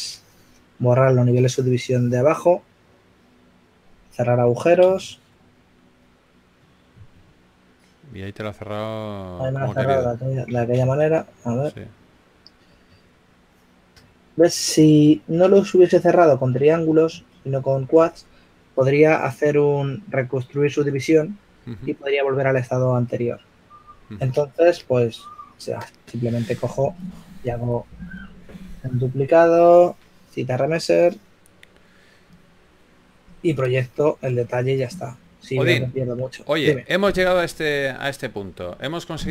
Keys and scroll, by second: 6.2-7.4 typing, 12.4-14.0 typing, 17.4-18.6 typing, 27.6 shift+f.